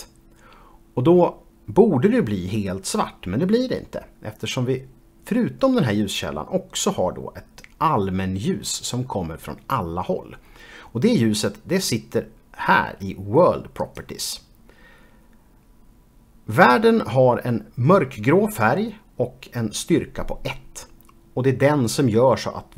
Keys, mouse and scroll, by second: 13.9 click.